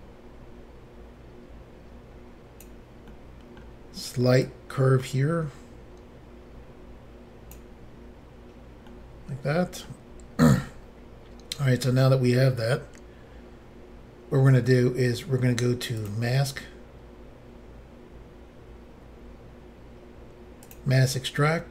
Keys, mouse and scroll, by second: 3.1 middle click, 4.5 click, 9.0 middle click, 10.5-11.1 scroll down 1, 11.7 middle click, 16.0 click, 16.1 click, 20.7 click.